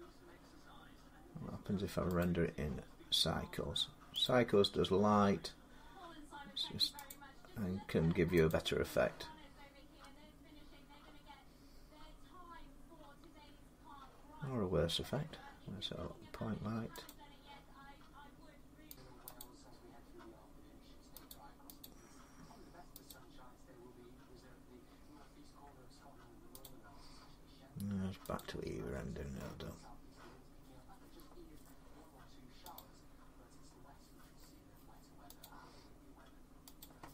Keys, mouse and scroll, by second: 2.0 click, 4.1 click, 5.7 middle click, 5.8 middle click, 6.1 middle click, 6.9 click, 8.3 click, 10.3 middle click, 10.4 middle click, 10.6 middle click, 10.8 scroll up 4, 12.3-12.8 scroll down 2, 14.7 middle click, 16.9 click, 17.5 middle click, 19.1 click, 19.2 click, 21.1 click, 21.6 click, 22.9 click, 26.4 click, 28.2 click, 32.6 click, 35.2 click, 36.6 click.